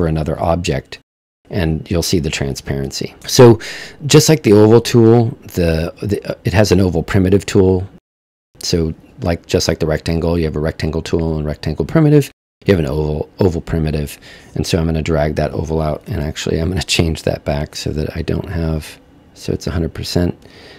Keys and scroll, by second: 0.3 super+z, 16.2 super+z.